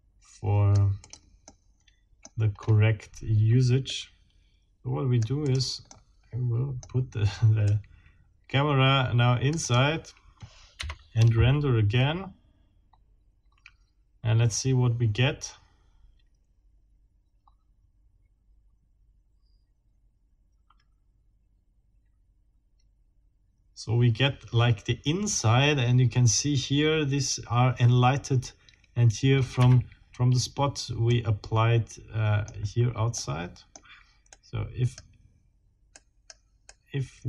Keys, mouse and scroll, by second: 1.0 click, 1.5 middle click, 2.6 scroll up 1, 3.9-5.4 right drag, 5.4 click, 5.9 click, 7.6-9.9 right drag, 9.6 click, 10.8 F12, 29.6 Escape, 30.2-30.6 scroll down 2, 31.1-32.6 middle drag, 33.2 middle click, 34.3 right click, 35.9 right click, 36.6-37.2 right drag.